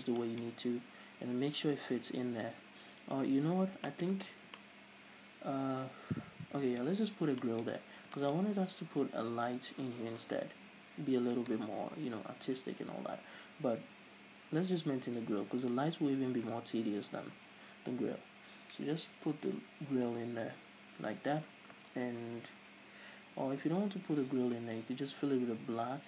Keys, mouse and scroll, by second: 0.4-26.0 shift+middle drag, 3.7 Tab, 4.8 a.